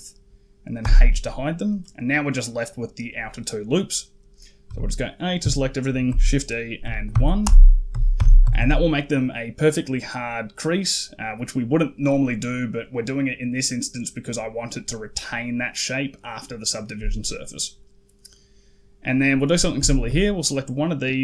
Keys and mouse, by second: 0.7 h, 1.2 middle click, 2.8 middle click, 4.5 a, 5.9 shift+e, 8.0 alt+h, 8.3 a, 8.4 a, 12.7 click, 17.2 click, 19.2 click, 19.7 shift+middle click.